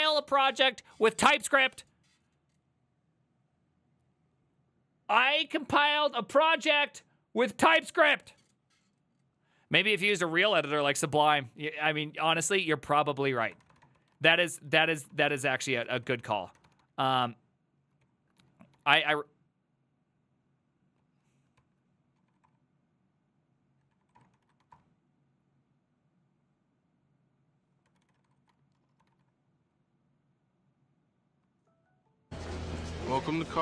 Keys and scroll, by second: 11.3 alt+{, 12.5 ctrl+c, 13.3-17.1 typing, 18.1 ctrl+w, 18.2-19.4 typing, 21.0 ctrl+w, 21.6 ctrl+c, 22.0-25.1 typing, 27.7-29.8 typing.